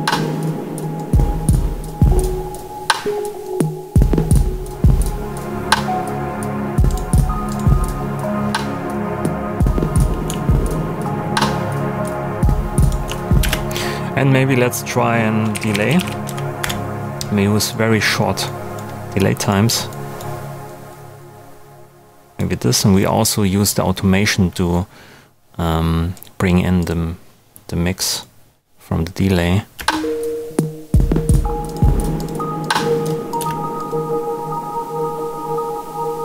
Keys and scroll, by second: 13.4 alt+space, 14.1 space, 15.2-16.4 typing, 16.6 Return, 29.7 space, 33.3 space.